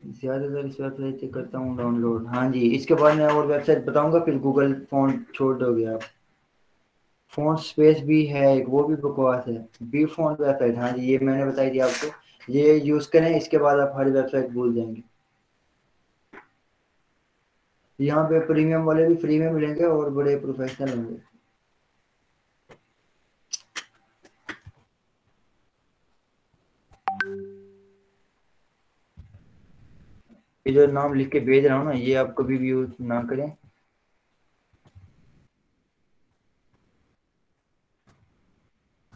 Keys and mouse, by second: 24.9-27.3 typing, 27.6 ctrl+Return, 28.9-33.2 typing, 33.4 Return, 34.9-39.1 typing.